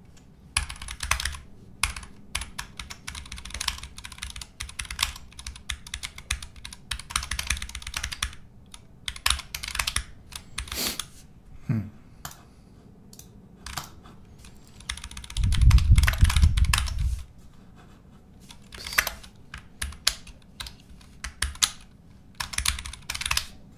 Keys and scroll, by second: 0.0-11.3 typing, 2.8 Escape, 14.6-16.4 typing, 16.8 Escape, 18.5-19.3 typing, 19.7 alt+v, 20.6 BackSpace, 21.4 alt+super+v, 22.3-23.7 typing.